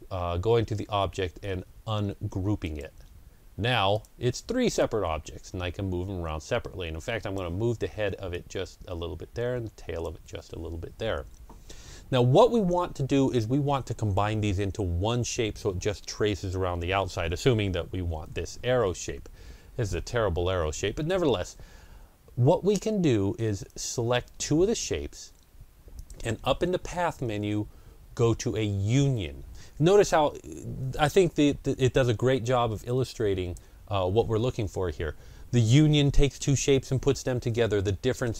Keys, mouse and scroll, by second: 2.5-12.4 drag, 22.8 click, 23.5-25.5 shift+drag.